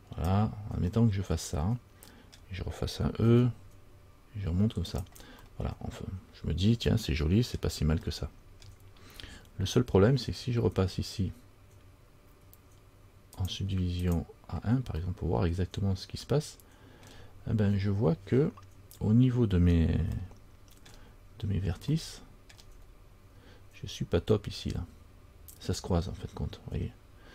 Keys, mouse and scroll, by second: 1.1-2.1 scroll up 1, 2.5-3.4 scroll down 1, 3.4 e, 5.6 e, 5.7 middle click, 8.2-8.8 scroll up 1, 8.8 middle click, 8.8-9.6 scroll down 1, 9.6-11.4 scroll up 2, 13.5 click, 14.2 click, 15.2 middle click, 17.3 scroll down 1, 17.5-18.2 scroll up 2, 20.3 scroll up 2, 20.4 shift+middle click, 21.1 shift+scroll down 1, 21.3-22.1 scroll up 3, 22.1-22.4 shift+scroll up 1, 22.4 shift+middle click, 23.2 scroll up 2.